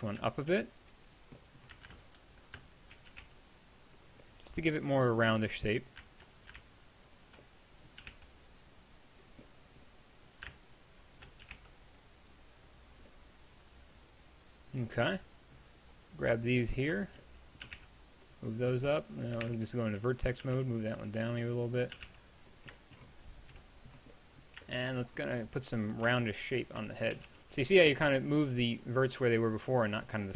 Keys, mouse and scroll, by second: 3.1 g, 8.0 g, 11.5 g, 17.7 g, 19.5 ctrl+Tab, 20.4 g, 23.5 KP_Decimal, 24.1 middle click, 27.1 middle click, 27.2 g.